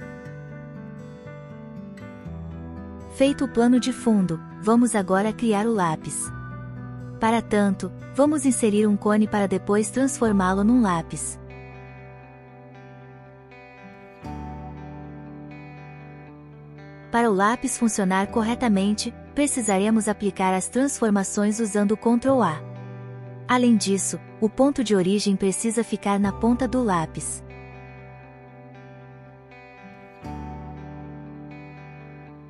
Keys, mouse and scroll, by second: 4.8 shift+click, 8.3-9.0 middle drag, 10.6 shift+a, 12.1 n, 12.7 click, 14.3 click, 16.2 ctrl+a, 17.1 n, 18.9 Tab, 19.9 click, 20.2 shift+middle click, 20.7 e, 22.3 Tab, 22.5 middle click, 23.3 KP_1, 23.7 Tab, 24.0 a, 25.0 shift+middle click, 26.8 shift+middle click, 27.4 shift+middle click, 27.9 middle click, 28.6 Tab, 29.5 n, 29.9 n, 30.3 shift+middle click.